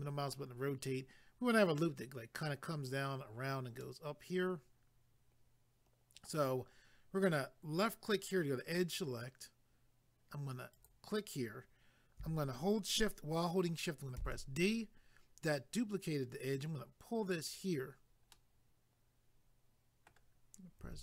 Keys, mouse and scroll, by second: 3.8 middle click, 8.1 click, 10.7 click, 17.3 click, 18.3 middle click, 20.8 g.